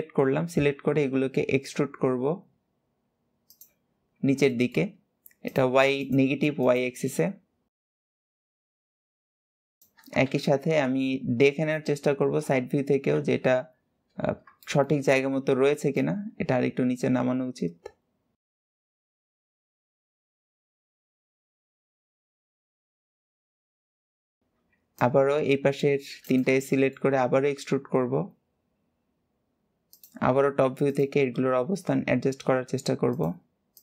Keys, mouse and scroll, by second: 0.2 e, 3.6 scroll up 3, 4.3-5.3 shift+middle drag, 5.8 shift+click, 6.4 shift+click, 6.8 g, 8.1 click, 8.2 g, 8.6 click, 8.6 g, 9.2 shift+click, 10.1 alt+z, 12.2 KP_2, 13.1 KP_3, 13.9-14.3 scroll up 4, 14.3 shift+middle click, 14.8-15.7 scroll up 3, 15.7 click, 19.4 click, 20.2 click, 20.8 click, 21.3 click, 21.9 click, 22.1 click, 22.8 click, 23.1 KP_7, 23.5-23.8 scroll down 6, 23.8 click, 24.2 scroll down 1, 24.4 c, 26.5 shift+middle click, 27.0 e, 30.1-30.7 scroll up 2, 30.7 click, 31.0 g, 33.6 click.